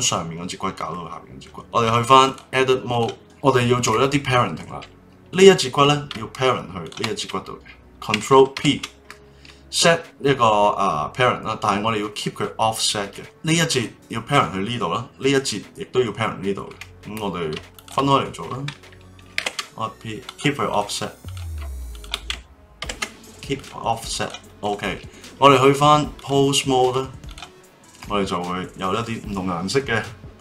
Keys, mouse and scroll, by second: 0.9-1.6 middle drag, 1.6 click, 2.2-3.2 drag, 3.2-5.3 middle drag, 5.3 click, 6.8 shift+click, 8.5 ctrl+p, 13.1 click, 17.7 shift+click, 19.4 ctrl+p, 20.7 click, 21.2 click, 21.9 shift+click, 22.8 ctrl+p, 24.2 click, 26.1-27.3 drag, 28.2-30.4 middle drag.